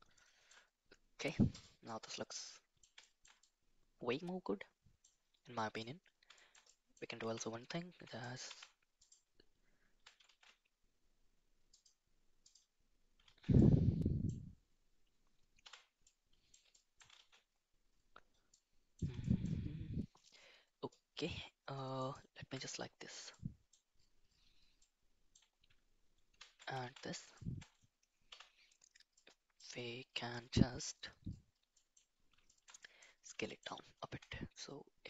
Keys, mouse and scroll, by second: 1.8-2.7 middle drag, 3.0 shift+middle drag, 3.3-5.0 middle drag, 5.5 middle drag, 6.3 shift+middle drag, 6.6 middle drag, 7.2 Tab, 7.9 Tab, 8.2 click, 8.4 Tab, 8.9 click, 10.3 shift+z, 11.7 click, 12.4 click, 13.2 shift+z, 13.5 middle click, 15.6 /, 16.0 middle click, 16.6 shift+middle click, 17.1 shift+z, 18.5 middle click, 19.2 shift+middle click, 21.9 alt+click, 23.3 middle click, 24.7 middle click, 26.2 ctrl+KP_Add, 26.8 shift+z, 27.3 shift+middle click, 28.2 /, 29.1 middle click, 31.7 middle click, 32.4 shift+middle click, 32.7 middle click, 33.3 shift+middle click, 34.0 s.